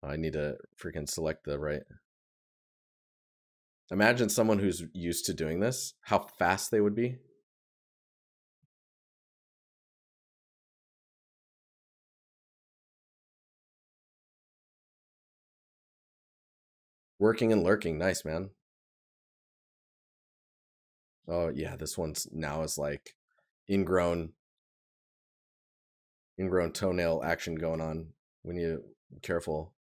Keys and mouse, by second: 9.1 right click, 18.8 right click, 21.5 right click, 29.0 right click.